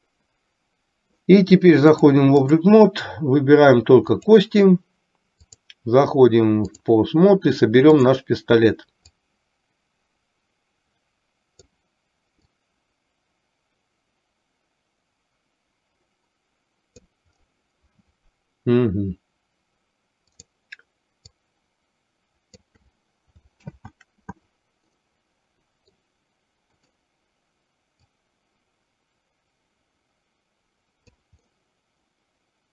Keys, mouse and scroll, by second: 2.0-2.8 drag, 4.4 click, 5.8-7.1 drag, 8.1 drag, 9.4-11.8 drag, 12.8-17.1 drag, 20.4 click, 21.4-23.0 drag, 23.8 ctrl+z, 25.0-26.3 middle drag, 28.1-31.4 drag, 31.6-32.7 middle drag.